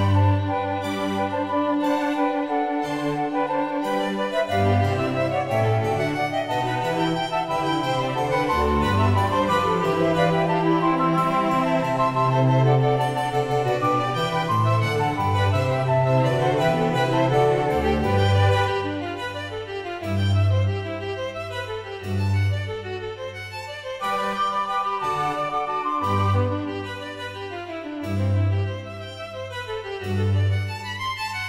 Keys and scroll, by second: 8.4 1, 10.5 ..